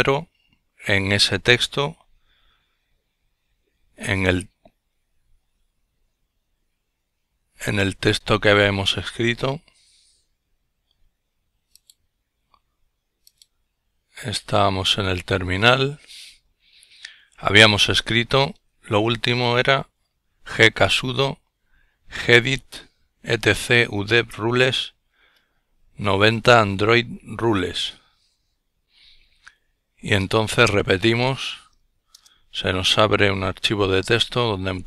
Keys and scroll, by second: 2.6 F12, 9.9 F12, 10.7 F12, 11.8 F12, 12.2 F12, 17.9 Up, 19.0 Up, 31.5 Return, 33.9 Tab.